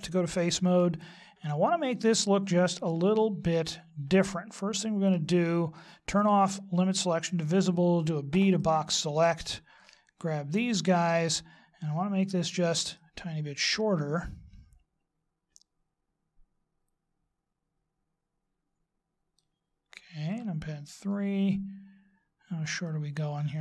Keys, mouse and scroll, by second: 0.7 middle click, 6.1 click, 8.3 b, 13.0 click, 20.3 KP_3, 22.9 click.